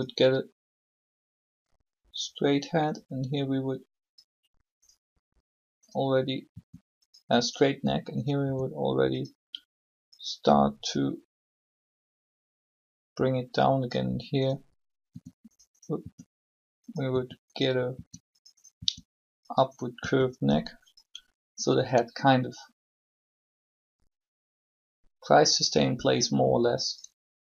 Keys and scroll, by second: 6.5 r, 8.4 r, 15.1 r.